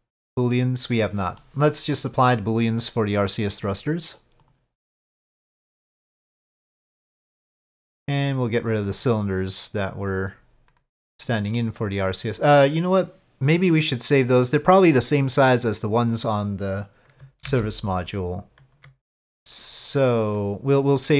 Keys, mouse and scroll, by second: 0.3 click, 1.4 middle drag, 1.6 click, 1.7 middle click, 1.7 click, 3.5-4.6 drag, 5.3-6.4 drag, 7.3-7.9 drag, 8.6 click, 10.7-11.3 drag, 17.5 ctrl+z, 20.2-20.8 drag.